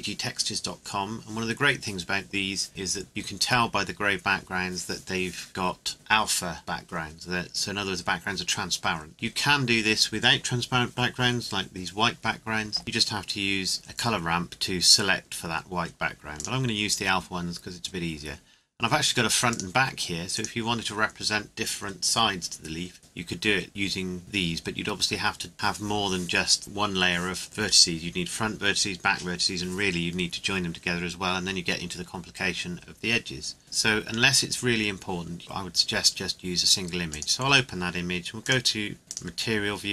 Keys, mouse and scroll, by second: 16.4 click, 19.5 click, 37.1 click.